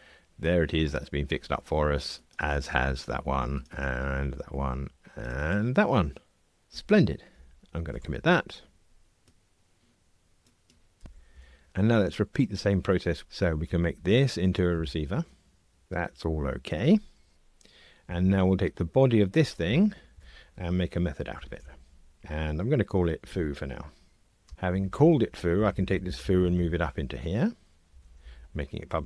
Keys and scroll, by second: 8.0 super+k, 13.7 alt+Return, 15.8 ctrl+r, 19.6 alt+shift+Left, 21.5 alt+super+m, 25.6 alt+shift+Up, 27.9 alt+shift+Left, 28.2 Delete.